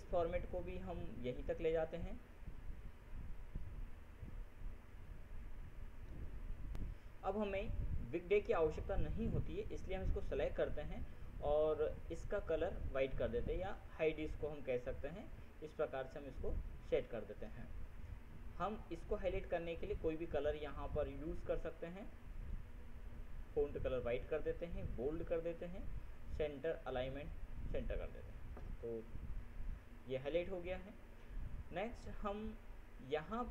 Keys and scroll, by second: 7.1 ctrl+F7.